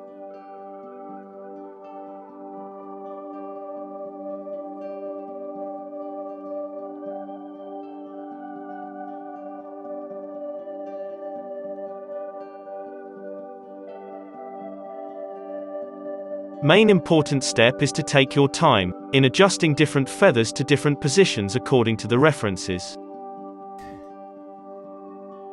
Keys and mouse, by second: 0.0-9.7 typing, 1.8 click, 7.3 click, 8.2 alt+a, 8.2 click, 9.7 click, 10.0 alt+a, 10.5 middle click, 10.7 click, 10.9-20.4 typing, 11.3 middle click, 11.6 ctrl+z, 13.4-14.7 middle drag, 14.8 Tab, 15.0 click, 15.2 Tab, 16.1 Tab, 16.2 Tab, 16.7 Tab, 17.0 Tab, 17.2 click, 18.6 Tab, 18.7 click, 19.2 Tab, 19.4 middle click, 20.2 click, 20.3-21.5 middle drag, 20.5 alt+a, 21.5 KP_Decimal, 21.5 KP_3, 21.7 middle click, 21.8 click, 22.4 r, 22.6 alt+a, 25.4-25.5 typing.